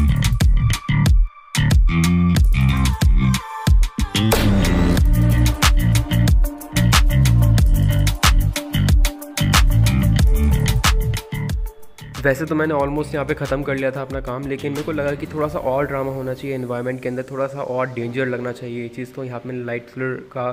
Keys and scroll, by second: 1.5 ctrl+KP_Add, 6.7 [, 6.9 [, 7.1 [, 8.2 [, 8.9 ctrl+z, 9.4 ctrl+z, 13.1 ctrl+z, 13.6 ctrl+z, 17.8 ctrl+z, 17.9 [, 18.1 ctrl+z, 19.1 e, 19.5 b.